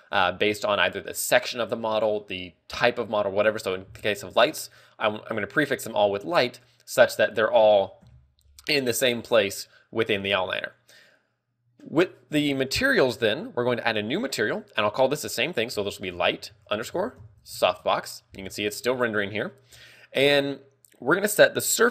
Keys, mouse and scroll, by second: 7.2 scroll down 1, 8.5-8.8 scroll down 3, 8.5 KP_Decimal, 13.1 click, 14.5 click, 21.7 click.